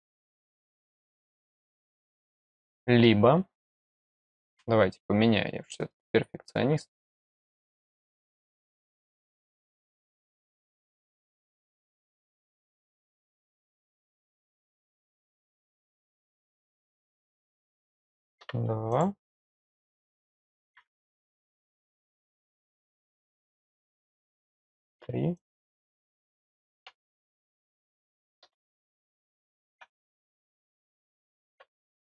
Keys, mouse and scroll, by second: 2.1 click, 5.1-5.5 scroll down 2, 8.0-9.9 scroll down 5, 10.9 scroll up 1, 11.1 click, 12.4 click, 12.6 click, 13.8 click, 14.2 click, 14.3 click, 15.2 click, 16.3 click, 16.7 click, 17.4 click, 18.8 click, 19.5 click, 22.0 click, 23.4 click, 23.9 click, 25.3 click, 25.7 click, 26.0 click, 27.2 click, 27.7 click, 28.8 click, 30.1 click, 30.6 click, 31.9 click.